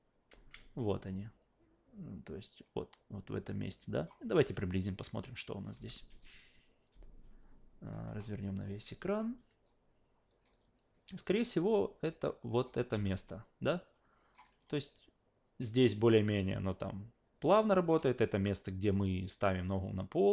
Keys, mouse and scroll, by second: 0.3 alt+v, 1.1-4.1 drag, 5.1 click, 5.7 f, 7.8 click, 9.1 click, 9.7-10.4 alt+right drag, 11.6-12.6 drag, 12.9 f, 13.4-14.3 alt+right drag, 14.6 click.